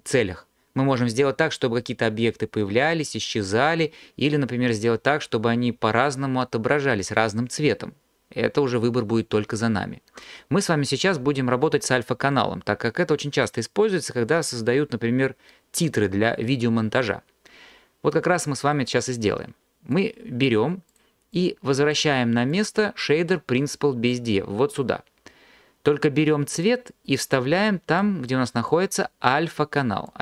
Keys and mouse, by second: 20.0 click, 20.9 click, 21.4 click, 22.5 click, 26.9 click.